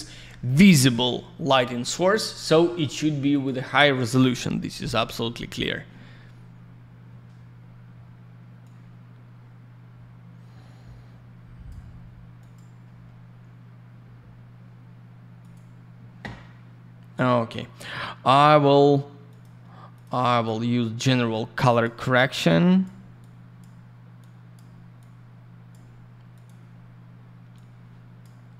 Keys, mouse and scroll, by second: 3.3 click, 3.4 click, 8.6 click, 12.4 click, 12.5 click, 15.4 click, 15.5 click, 19.2 click, 19.4 click, 19.9 click, 20.0 click, 20.3 click, 20.4 click, 21.1 click, 22.4 click, 23.1 click, 24.2 click, 24.9 click, 26.3 click, 26.4 click, 27.5 click.